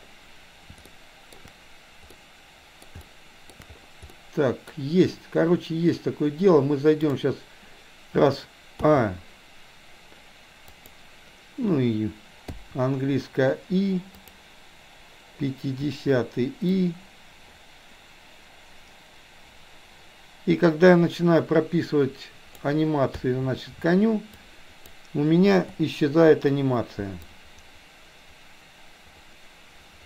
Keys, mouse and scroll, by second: 1.0 shift+middle click, 2.1 middle click, 3.1 shift+middle click, 4.1 middle click, 7.0 click, 8.9 a, 10.8 click, 12.5 i, 14.3 click, 15.9 i, 16.8-22.8 drag, 23.1 a, 23.6 a, 24.4-24.9 drag, 25.8 Delete, 27.3-30.0 drag.